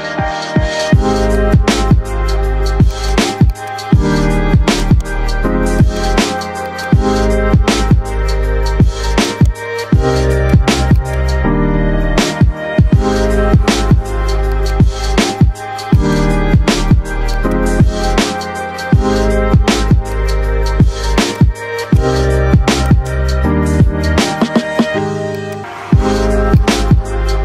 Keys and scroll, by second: 13.5 F4, 19.1 shift+Page_Up, 20.3 shift+F2, 20.7 Escape.